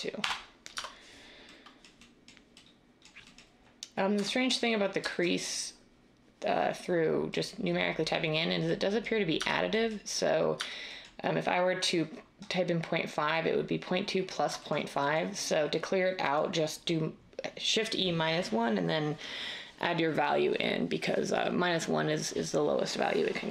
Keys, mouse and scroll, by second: 0.2 Return, 0.7 Tab, 4.2 Tab, 9.4 Tab, 10.6 Tab.